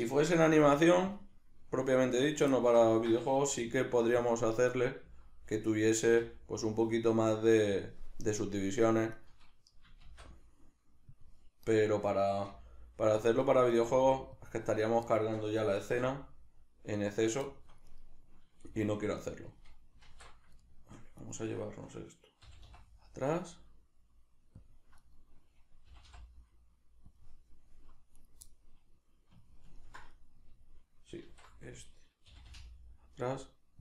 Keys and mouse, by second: 0.5 g, 1.2 click, 2.0 alt+q, 2.6-4.3 shift+middle drag, 3.5 g, 4.3 click, 4.8 right click, 5.0 z, 5.6 right click, 6.2 g, 7.8 click, 8.4 right click, 9.2 right click, 10.0 shift+d, 11.2 click, 11.7 right click, 12.5 g, 13.3 click, 13.8 right click, 13.9 g, 14.5 click, 14.8 right click, 15.1-17.3 shift+middle drag, 15.8 shift+d, 17.3 click, 17.4 shift+middle click, 17.9 right click, 18.6 g, 19.6 click, 20.1 alt+q, 20.6 shift+middle click, 21.2 right click, 22.4 g, 24.7 click, 25.0 right click, 25.8 g, 27.2 click, 28.2 right click, 28.5-33.8 middle drag, 31.2 alt+q, 32.3 g.